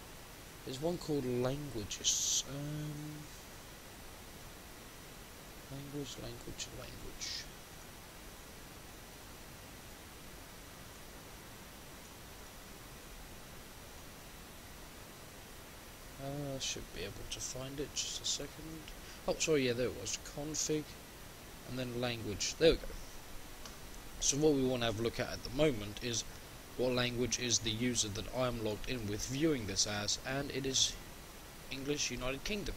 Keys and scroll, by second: 28.8 shift+F10.